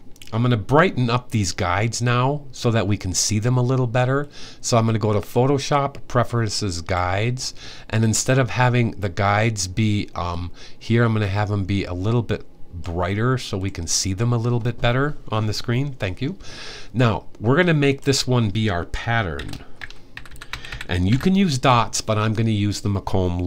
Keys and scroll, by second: 18.9-21.4 typing.